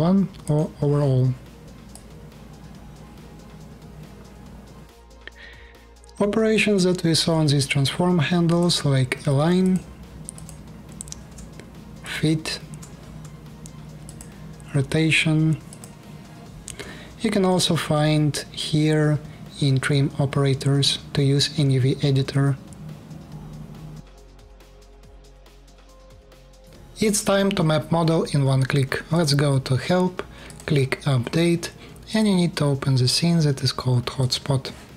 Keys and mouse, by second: 5.0 alt+click, 5.1-6.7 alt+middle drag, 26.6-28.4 middle drag, 28.9-31.9 drag, 33.9-34.9 drag.